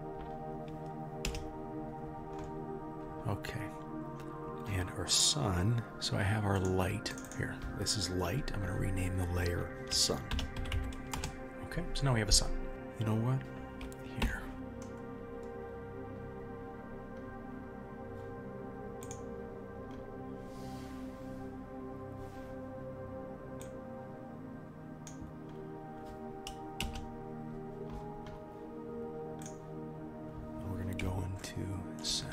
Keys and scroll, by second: 1.3 KP_0, 26.8 KP_0, 29.4 KP_1.